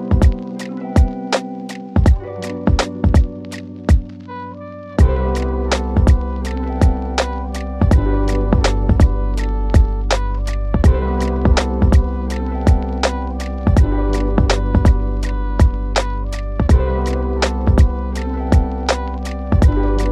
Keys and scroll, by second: 2.1 ctrl+k, 6.9 c, 9.0 shift+Page_Up.